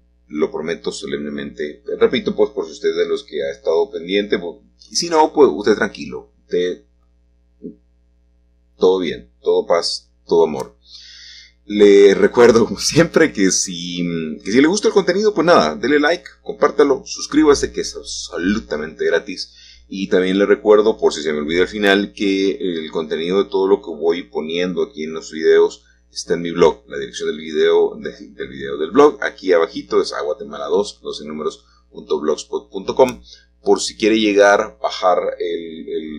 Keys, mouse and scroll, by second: 2.6 Escape, 10.4 r, 11.6 x, 16.2-20.6 drag, 21.2-25.6 drag, 25.8-29.2 drag, 31.8 1, 33.3-33.9 scroll down 1, 33.9 shift+middle click, 35.0 g.